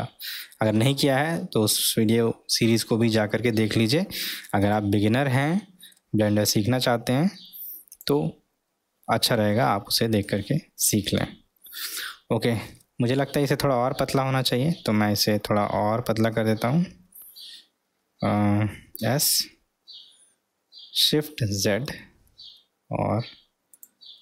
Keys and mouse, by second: 1.1 s, 5.4-6.0 middle drag, 6.5 s, 11.9 shift+s, 13.1 s, 19.0 s, 24.1-24.2 middle drag.